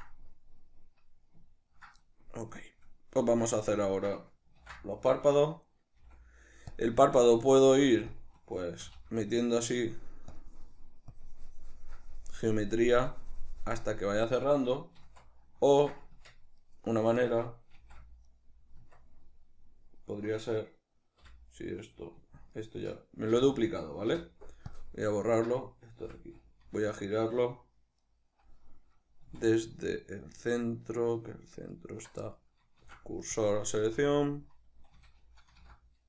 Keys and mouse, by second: 3.2 Tab, 4.8 ctrl+d, 6.0 f, 6.7 click, 7.3 ctrl+middle click, 7.8 f, 8.1 click, 8.8 c, 10.3 click, 11.1-16.6 drag, 15.2 ctrl+z, 16.2 Tab, 16.6 right click, 17.8 shift+d, 18.4 right click, 18.8 Tab, 20.2 right click, 21.2 l, 22.6 right click, 23.4 l, 25.6 right click, 26.1 l, 28.2 right click, 29.3 z, 29.6-31.8 middle drag, 31.8 alt+right click, 32.3-35.0 middle drag, 32.8 shift+s, 33.8 z, 35.0 a.